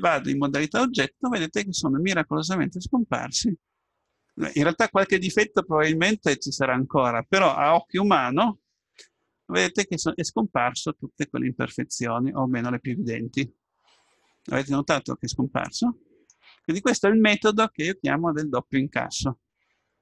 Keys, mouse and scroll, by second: 0.3 Tab, 1.3-3.2 middle drag, 9.8-11.8 middle drag.